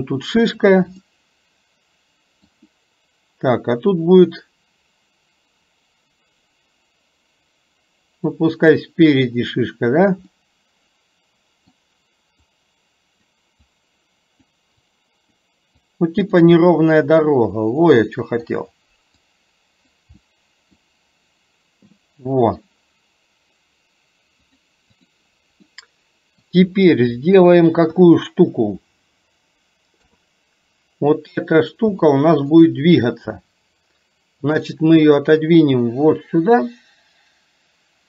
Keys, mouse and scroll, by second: 1.0-2.5 middle drag, 8.4-9.8 drag, 10.4-11.8 middle drag, 12.5 click, 13.7 click, 14.8 click, 15.9 click, 16.6 middle click, 18.0 middle click, 19.3 click, 20.3 middle click, 22.0 middle click, 24.7 click, 25.8-26.6 middle drag, 28.1 KP_1, 30.0 KP_3, 32.2-33.3 middle drag, 34.8-38.0 drag.